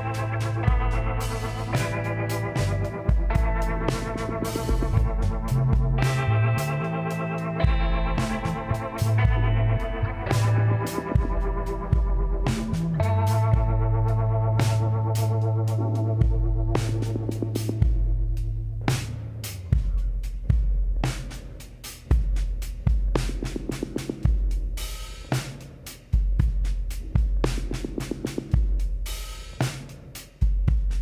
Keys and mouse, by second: 1.8 KP_1, 3.1-4.9 drag, 5.6-7.2 drag, 7.2-8.9 middle drag, 8.9 click, 9.3 s, 11.9-13.8 drag, 13.8 middle click, 16.4-21.3 drag, 20.1-21.8 middle drag, 21.5-23.2 drag, 22.0-23.2 middle drag, 23.0 s, 25.9-28.1 drag, 28.0 s, 30.8-31.0 drag.